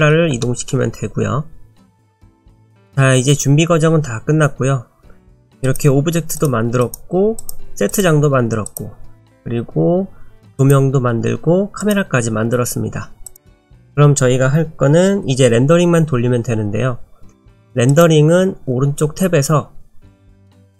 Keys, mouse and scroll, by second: 0.4 shift+middle click, 1.6 scroll down 1, 2.0 scroll up 1, 2.5 click, 5.6 click, 6.4 click, 7.4 click, 7.9 click, 10.6 click, 11.8 click, 17.9 click.